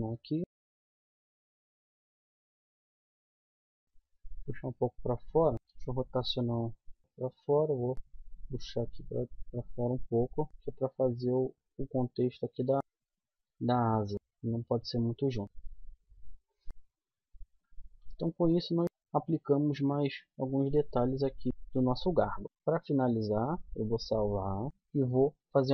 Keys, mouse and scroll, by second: 0.8 click, 1.0 middle click, 1.5 right click, 2.1 ctrl+z, 2.3 c, 3.0 click, 3.3 middle click, 3.8-5.5 drag, 5.5 KP_7, 6.2 r, 7.5-8.5 drag, 10.2-12.0 middle drag, 12.8-14.3 middle drag, 14.6 middle click, 15.4 KP_1, 15.6 z, 16.7 a, 17.9 z, 23.2-24.7 drag.